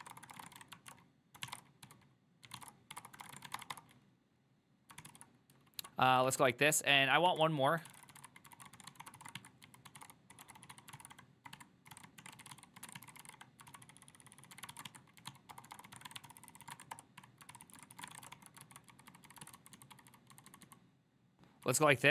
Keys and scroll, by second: 0.0-22.1 typing, 7.5 Return, 16.7 ctrl+c, 17.0 Return, 17.6 ctrl+c, 17.7 ctrl+c, 17.8 ctrl+c, 18.7 ctrl+u.